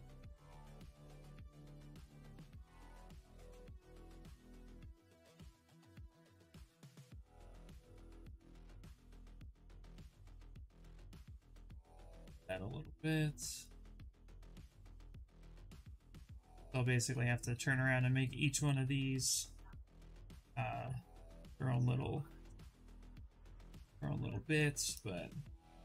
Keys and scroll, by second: 17.6 q, 24.7 shift+f.